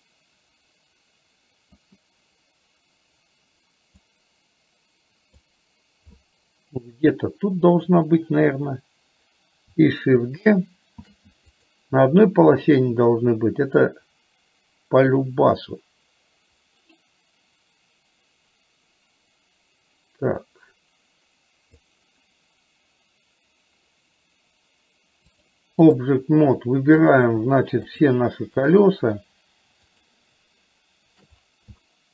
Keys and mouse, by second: 4.1-5.5 drag, 11.1 shift+d, 13.0-22.1 drag, 25.6 click, 27.1 click, 28.0 shift+click, 30.1 shift+click, 31.9 shift+middle click.